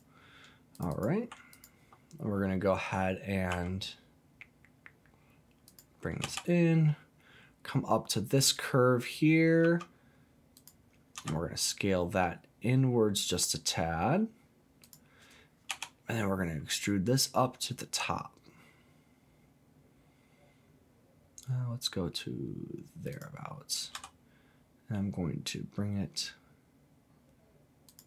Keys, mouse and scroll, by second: 0.7 click, 0.9 click, 1.5 alt+click, 3.5 s, 5.6 click, 6.2 e, 9.6 z, 10.6 click, 11.2 s, 14.8 click, 15.7 e, 23.1 click, 23.9 s, 27.9 click.